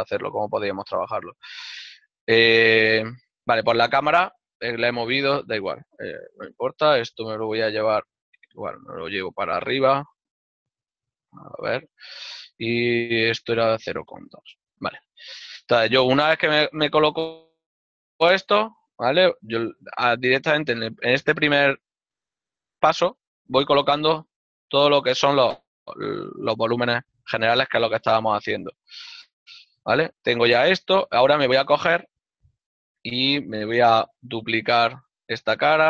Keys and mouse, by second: 1.3 click, 5.9 right click, 6.5 l, 7.7 shift+d, 10.7 click, 11.1 z, 15.7 shift+middle click, 17.3 z, 18.6 click, 20.9 right click, 21.7 click, 23.3 ctrl+click, 27.2 shift+middle click, 30.3 click, 32.5 click, 33.4 click, 34.2 right click.